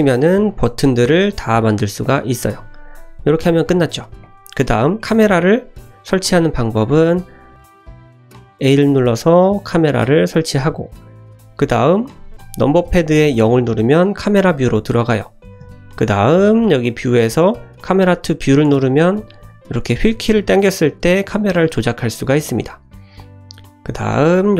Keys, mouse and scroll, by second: 0.0 shift+click, 0.5 shift+click, 0.9 g, 2.2 click, 2.4 middle click, 2.7 `, 2.9-3.4 scroll down 2, 3.3 shift+middle click, 3.6-3.9 middle drag, 4.2 click, 4.9-6.0 scroll down 2, 7.5 Delete, 7.5 middle click, 7.5 click, 8.2 shift+a, 13.4 KP_0, 15.6 n, 16.8 click, 17.8 click, 18.6 click, 19.1-19.6 scroll down 1, 19.6-22.4 scroll down 12, 22.5 shift+middle drag, 23.2 middle click, 23.7-24.1 scroll up 1, 24.1 shift+middle click.